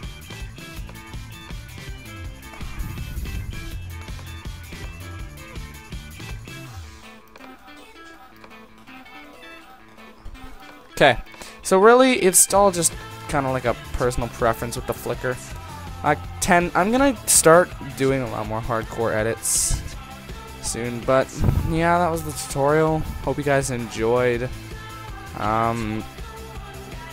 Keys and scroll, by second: 15.6 ctrl+0.